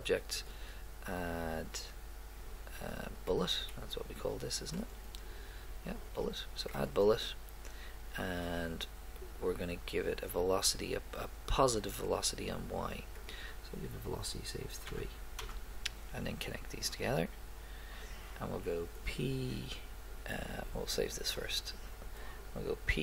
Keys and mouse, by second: 0.4-2.3 drag, 3.7 middle click, 13.2-15.3 drag, 16.8-18.6 drag, 21.2-22.4 drag, 22.9 p.